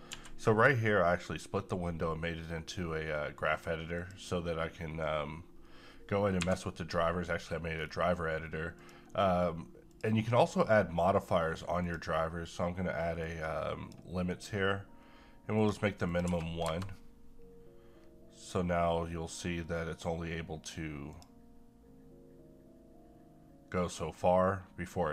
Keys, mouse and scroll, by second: 0.0 n, 3.9 click, 6.4 Home, 7.4 scroll down 1, 8.8-15.5 drag, 16.2 1, 21.1 click.